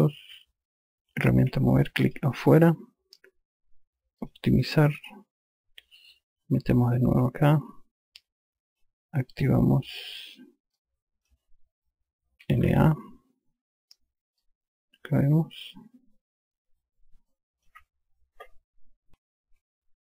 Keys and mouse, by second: 1.9 e, 2.6 click, 4.8 click, 7.0 click, 9.3 click, 10.5 click, 11.3 alt+click, 12.7-13.7 typing, 14.9 alt+click.